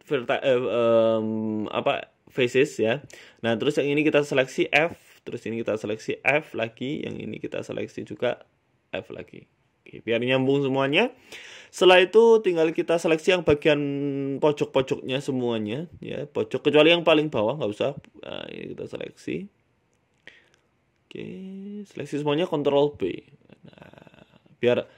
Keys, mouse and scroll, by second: 0.0 middle click, 1.4 click, 2.1 right click, 2.5 shift+right click, 3.2 ctrl+z, 3.5 shift+right click, 4.0 middle click, 4.5 f, 4.7 middle click, 5.5 right click, 5.7 shift+right click, 6.7 f, 7.3 right click, 7.5 middle click, 8.1 right click, 8.5 shift+right click, 9.8 f, 10.0 middle click, 10.2 Tab, 10.5 middle click, 10.9 Tab, 11.2 middle click, 12.1 a, 12.2 a, 12.9 alt+shift+Right, 14.3 ctrl+z, 14.5 alt+shift+Right, 22.7 ctrl+b, 24.4 Tab, 24.5 scroll down 1, 24.6 middle click.